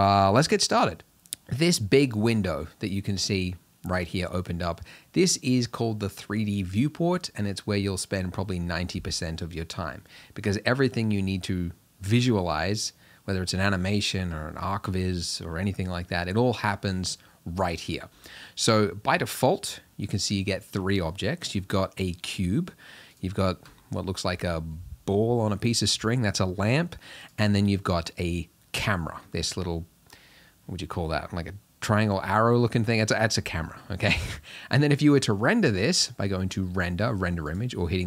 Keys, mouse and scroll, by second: 0.0 click, 1.1 click, 23.2 click, 27.3 click.